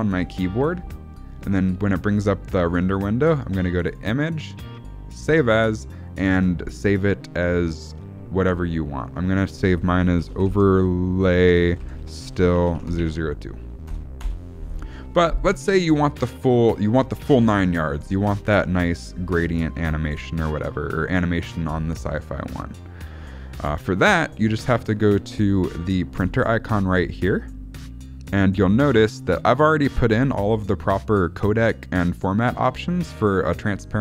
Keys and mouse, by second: 20.0 space, 23.6 space.